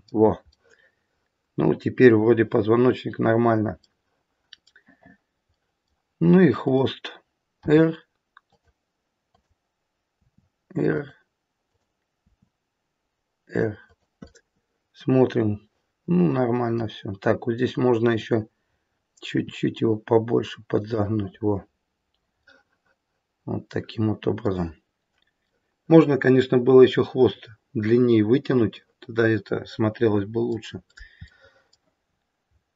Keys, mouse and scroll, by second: 0.5 middle click, 3.8 middle click, 5.5 middle click, 6.5 click, 7.6 r, 9.2 click, 10.1 r, 11.6 click, 12.3 r, 14.3 middle click, 15.5 middle click, 18.0 click, 19.3 r, 22.4 middle click, 25.5 middle click, 30.7 scroll up 2, 30.8 middle click, 31.2 middle click, 31.9-32.7 scroll down 4.